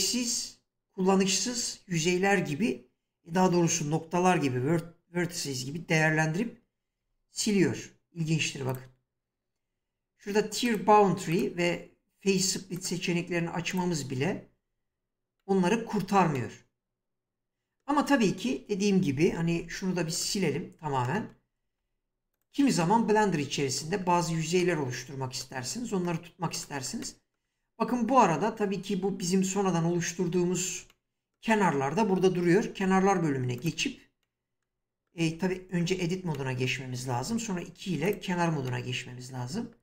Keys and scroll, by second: 7.0 F3, 19.5 x, 21.6 Tab, 32.8 2, 35.3 Tab.